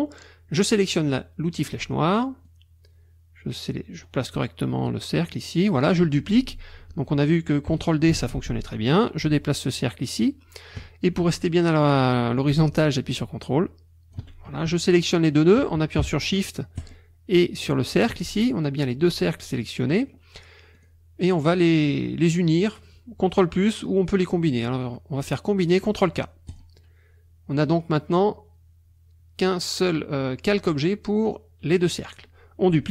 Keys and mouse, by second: 1.7 click, 2.5-5.9 drag, 8.1 ctrl+d, 8.7-14.3 ctrl+drag, 16.8 shift+click, 20.8 click, 26.5 click.